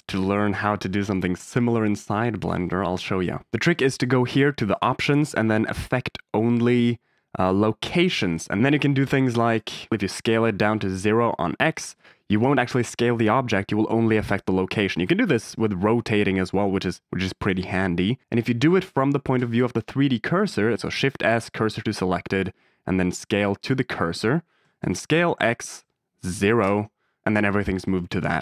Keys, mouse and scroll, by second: 1.0 click, 1.2 x, 1.9 click, 2.1 x, 2.8 shift+a, 4.6-8.2 drag, 8.9 click, 9.4 click, 9.9 s, 9.9 x, 11.7 KP_0, 11.8 KP_Enter, 14.5 ctrl+z, 14.8 r, 17.3 click, 18.8-19.8 drag, 20.3 click, 20.7 shift+s, 20.9 shift+s, 23.3 click, 24.6 s, 24.7 x, 26.1 KP_0, 26.6 KP_Enter.